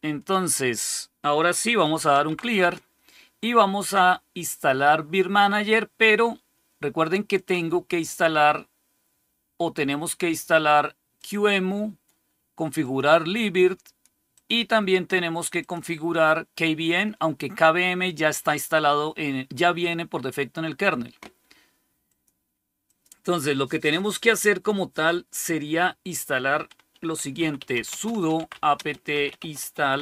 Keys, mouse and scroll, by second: 1.3-2.7 typing, 7.2 click, 11.1 click, 12.7 click, 14.2 click, 15.5 click, 22.0 click, 22.8 click, 26.8-30.0 typing.